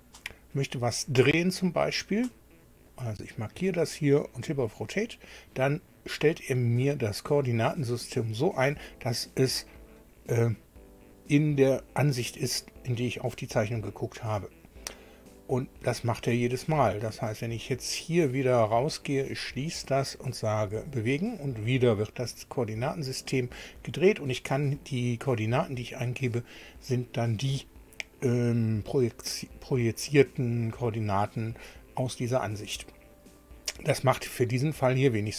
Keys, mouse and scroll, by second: 2.9 click, 4.5 click, 16.4-17.4 middle drag, 19.3 click, 20.6 click.